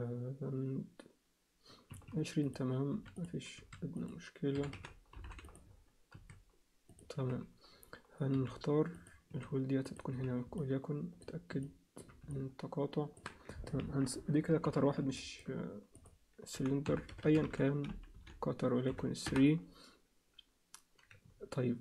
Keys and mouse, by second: 2.4 click, 2.9 s, 3.6 s, 4.5 r, 6.1 s, 7.1 z, 8.3 g, 9.3 s, 10.1 z, 10.6 alt+middle click, 11.6 alt+middle click, 12.3 alt+middle click, 13.8 ctrl+KP_1, 14.7 z, 15.2 ctrl+alt+middle click, 15.9-19.5 drag, 17.2 t, 21.2 z.